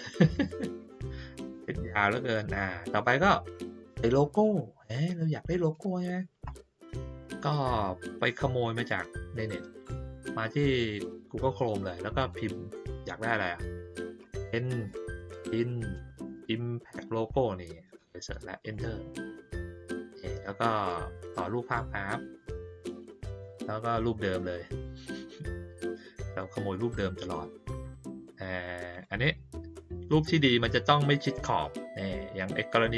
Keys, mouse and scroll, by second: 0.9 click, 1.5-2.8 drag, 8.7 click, 12.1 click, 21.1 click, 23.4 middle click, 23.4 scroll down 1, 25.8 click, 28.9 click.